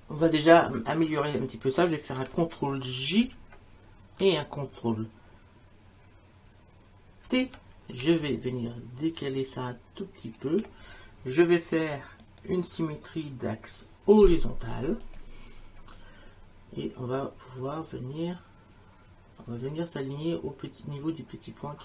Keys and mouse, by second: 3.2 ctrl+j, 7.2 ctrl+t, 8.1 shift+click, 12.2 right click, 15.0 click.